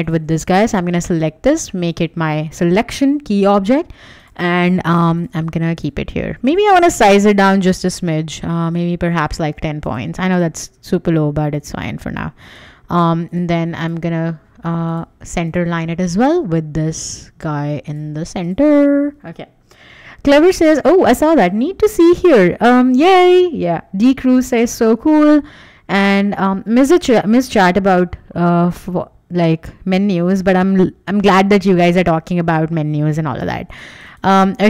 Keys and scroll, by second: 7.5 super+a, 9.4 Escape, 31.9 w, 33.2 w.